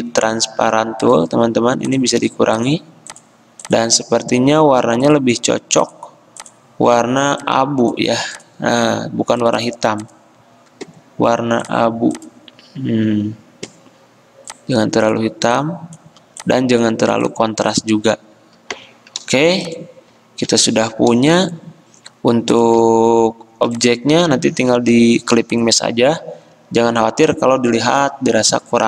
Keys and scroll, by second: 18.9 Escape.